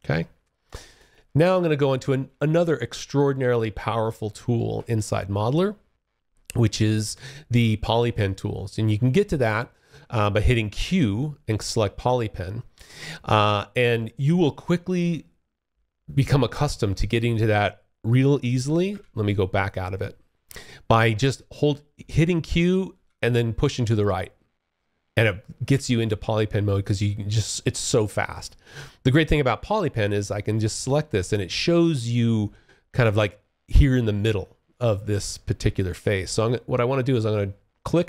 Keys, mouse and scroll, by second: 0.9 alt+click, 1.4 alt+middle click, 1.8 alt+click, 2.5 alt+middle click, 2.9 alt+click, 3.5 alt+middle click, 4.0 alt+click, 7.2 q, 11.1 click, 18.8 click, 22.1 q, 26.0 alt+click, 26.6 alt+right click, 28.4 alt+click, 36.2 click.